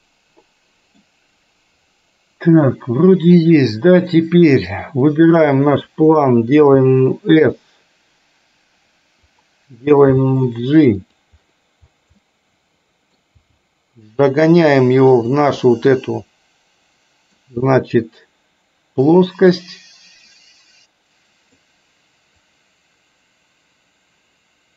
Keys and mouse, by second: 2.8 middle click, 4.8 click, 6.7 s, 10.2 g, 12.3 middle click, 13.5 g, 16.1-17.5 middle drag, 19.7-21.7 drag, 22.5-24.7 drag.